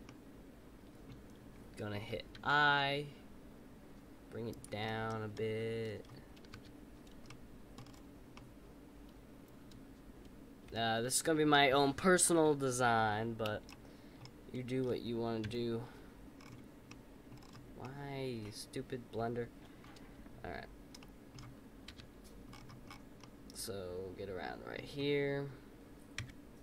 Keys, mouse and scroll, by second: 0.0-2.3 middle drag, 4.8-6.5 middle drag, 6.5 KP_5, 7.2 middle click, 7.7-8.3 scroll down 5, 8.3-11.4 middle drag, 13.6-15.4 middle drag, 15.4 KP_Decimal, 16.3-16.8 scroll up 4, 16.8 middle click, 17.3-17.8 scroll down 4, 17.8-20.9 middle drag, 20.9 middle click, 21.8 KP_5, 22.4-23.2 scroll up 9, 23.2 middle click, 26.1 KP_Decimal.